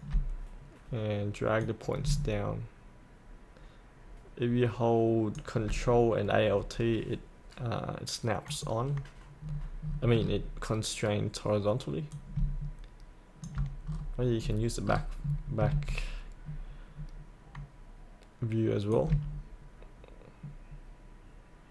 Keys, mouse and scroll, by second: 1.6-6.2 drag, 8.5 click, 9.4-10.1 scroll down 1, 10.2-12.1 scroll down 1, 12.1-13.8 drag, 13.9-15.6 scroll down 1, 16.4-18.9 scroll down 1, 18.9-21.7 drag.